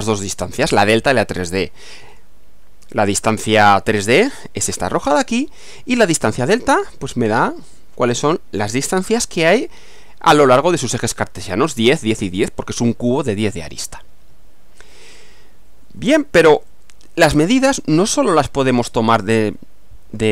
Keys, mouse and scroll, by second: 0.2-2.4 middle drag, 5.4-6.4 middle drag, 12.9-15.0 middle drag, 16.2 scroll down 2, 16.7-18.0 shift+middle drag, 18.2 shift+scroll down 2, 18.8-19.7 middle drag.